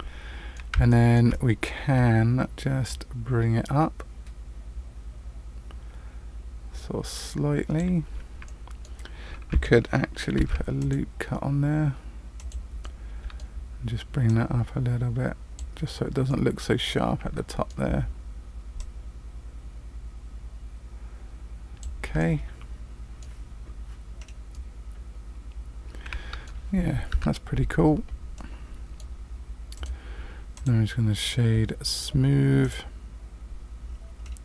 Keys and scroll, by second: 10.3 ctrl+r, 27.1 Tab.